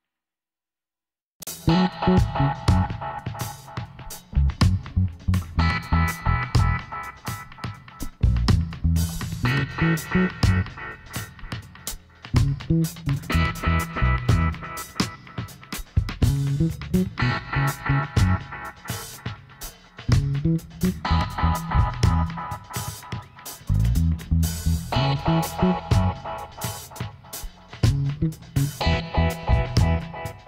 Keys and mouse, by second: 1.3-3.3 drag, 3.3 middle click, 4.0 ctrl+r, 6.2 g, 8.5-9.9 middle drag, 9.7 ctrl+r, 9.9 click, 10.0 right click, 11.0 ctrl+r, 12.9 g, 15.5 ctrl+r, 18.7 click, 18.8 g, 19.2 click, 23.9 click, 24.6-25.7 middle drag, 25.4 g, 25.7 click, 29.2-30.4 drag, 30.1 g.